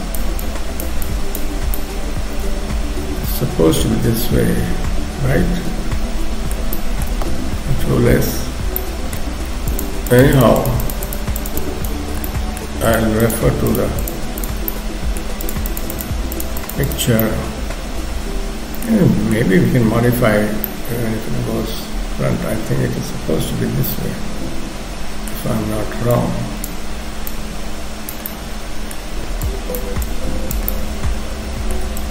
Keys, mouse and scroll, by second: 0.5 click, 1.1 click, 1.5-2.1 scroll down 2, 1.7 middle click, 6.7 shift+middle click, 7.9 ctrl+s, 8.8 shift+middle click, 9.3 scroll up 1, 9.7 shift+click, 10.1 shift+click, 10.6 shift+click, 12.3 middle click, 12.9 shift+click, 13.3 shift+click, 14.7 middle click, 15.5 shift+click, 15.7 shift+click, 17.2 middle click, 19.9 ctrl+s, 20.7 middle click, 25.5-25.9 scroll up 1, 26.1 click, 26.1-27.2 scroll up 1, 27.3 click, 28.3 middle click, 29.5 click, 30.1 click, 30.7 middle click, 32.0 shift+click.